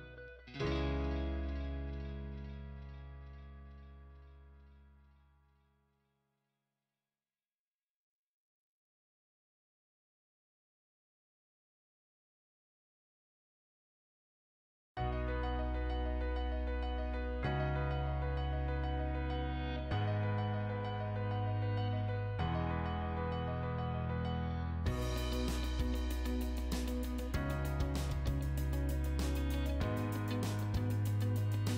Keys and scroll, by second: 7.2-9.3 typing, 14.4 o, 14.7 space, 15.3 1, 15.5 Return, 19.3 Escape, 21.8 p, 22.2 space, 23.4 6, 23.6 Return, 24.2 space, 25.9 m, 26.1 space, 28.8-29.8 typing, 31.0-31.7 typing.